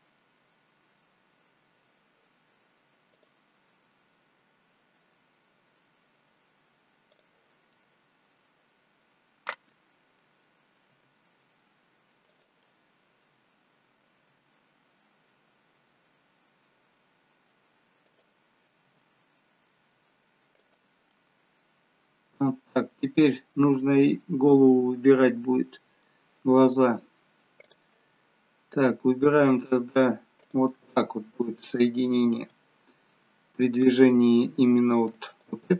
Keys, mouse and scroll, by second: 0.5 scroll up 2, 3.2 click, 7.1 click, 7.7 middle click, 11.0 g, 12.6 middle click, 14.3 g, 18.9 g, 21.1 middle click, 23.9 middle click, 27.7 click, 30.4 shift+click, 31.5 middle click, 32.2-32.8 scroll down 3, 32.8 shift+middle click, 34.4 shift+middle click, 35.4 click.